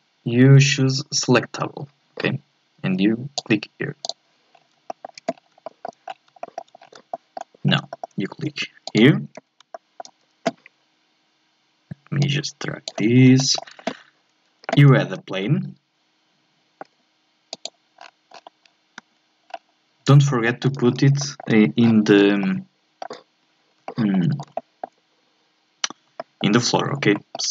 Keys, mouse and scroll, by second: 4.5 scroll up 1, 4.9 middle click, 5.3-5.7 scroll up 2, 5.7 middle click, 6.0 scroll up 3, 6.4 middle click, 6.8-7.1 scroll up 1, 7.1 middle click, 7.6-7.9 scroll up 1, 7.9 middle click, 8.8 click, 9.7-12.2 middle drag, 12.2-13.4 drag, 13.4-15.0 shift+middle drag, 15.0 shift+a, 18.0-18.8 scroll down 13, 19.0 KP_1, 19.5 scroll up 2, 20.1 scroll up 5, 20.5 shift+middle click, 20.8-21.2 scroll up 4, 21.2 shift+middle click, 21.8 scroll down 1, 22.4-23.7 shift+middle drag, 23.7 scroll up 1, 23.8-26.8 shift+middle drag, 26.8-27.1 scroll up 2, 27.1-27.5 shift+middle drag.